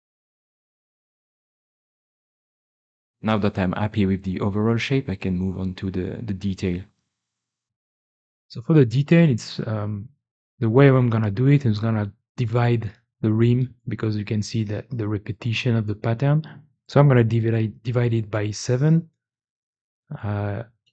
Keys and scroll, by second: 2.9 e, 3.1 e.